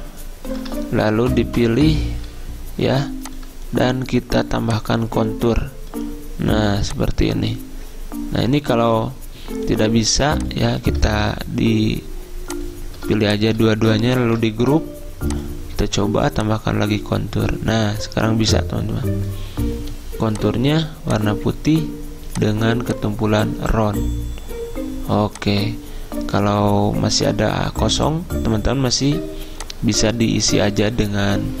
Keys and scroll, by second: 14.4 ctrl+g.